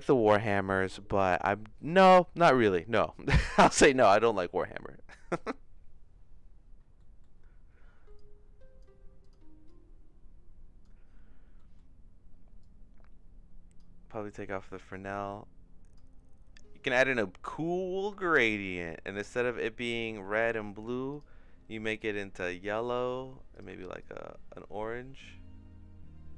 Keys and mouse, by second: 6.9 middle click, 8.2 click, 9.2 click, 11.6 middle click, 12.6-13.7 drag, 14.1 middle click, 14.9-15.9 drag, 18.2 shift+middle click, 18.7 middle click, 21.1 click, 23.5 click.